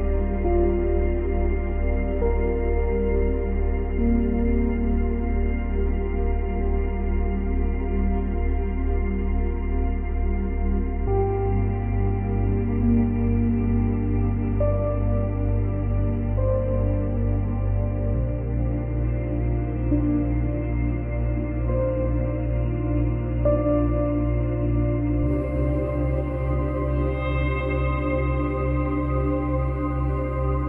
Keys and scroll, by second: 18.0 ctrl+c, 18.1 ctrl+v, 18.9 ctrl+z, 22.1 Delete, 28.0 space, 29.3 space.